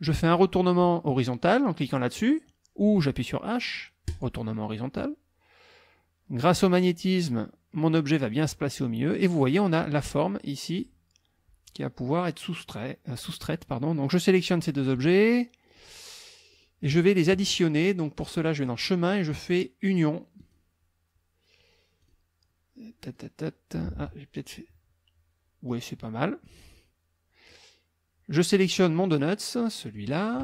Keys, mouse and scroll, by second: 4.1 click, 6.4-8.4 drag, 14.3 click, 15.7 shift+click, 16.5 shift+click, 18.4 click, 20.4 click, 22.0 click, 23.2 click, 23.9 ctrl+z, 24.4 ctrl+click, 25.7 click, 29.9 click.